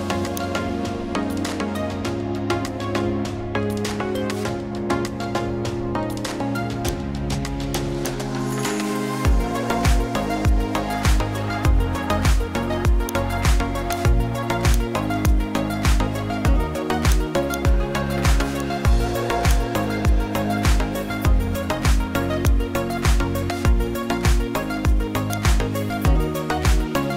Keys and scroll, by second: 12.8 ctrl+alt+space.